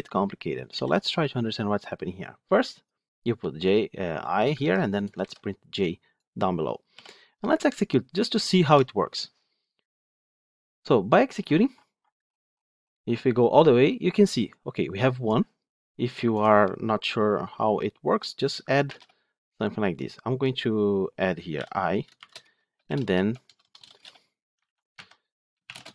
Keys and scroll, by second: 0.6 ctrl+alt+l, 4.5 ctrl+c, 5.1 ctrl+v, 8.4 ctrl+shift+F10, 23.9 shift+Return, 24.5 ctrl+z.